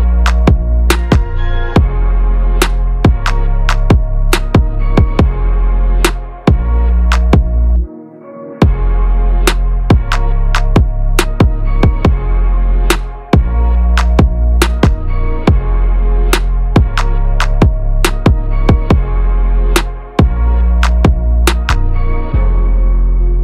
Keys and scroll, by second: 3.4 ctrl+a, 8.4 ctrl+a.